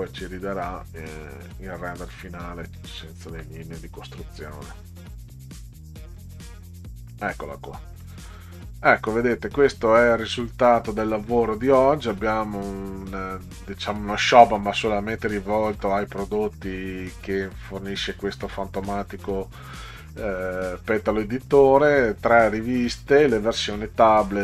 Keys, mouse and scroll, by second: 0.3-0.8 scroll up 1, 7.1 middle click.